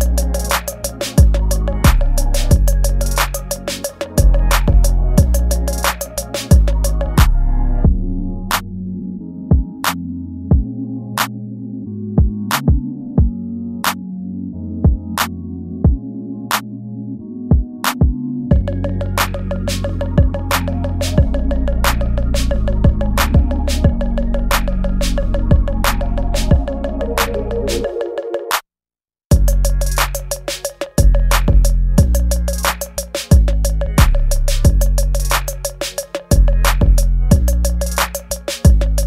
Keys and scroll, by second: 1.5 space, 4.5 ctrl+z, 7.9 ctrl+z, 10.0 space, 11.3 space, 12.2 space, 15.6 ctrl+s, 16.3 space, 17.5 space, 18.3 ctrl+z, 18.9 space, 19.6 ctrl+z, 20.1 space, 20.7 ctrl+z, 22.0 space, 23.0 space, 23.5 space, 27.6 space, 28.4 space, 32.0 space, 38.1 space, 38.6 space.